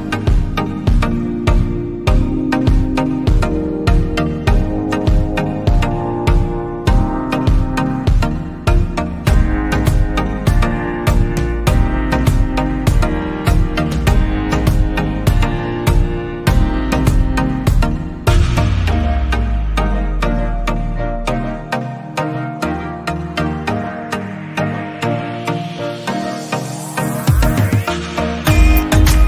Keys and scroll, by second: 6.6 ctrl+c, 7.3 ctrl+v.